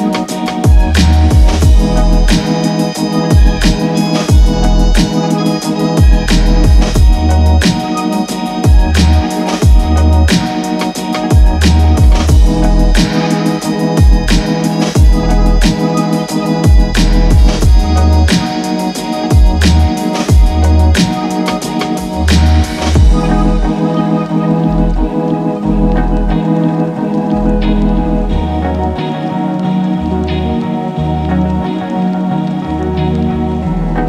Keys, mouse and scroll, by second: 2.8-8.3 drag, 8.3-11.4 drag, 11.4 click, 12.6 space.